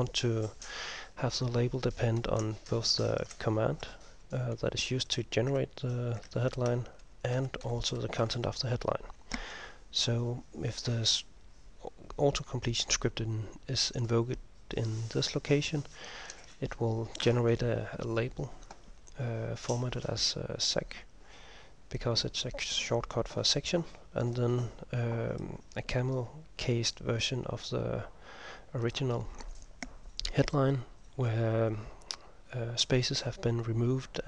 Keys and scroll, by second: 2.3 Home, 2.5 Right, 3.2 ctrl+Right, 5.6 Right, 6.4 ctrl+Right, 7.5 End, 8.3 Left, 8.3 Home, 8.5 End, 16.4 ctrl+m.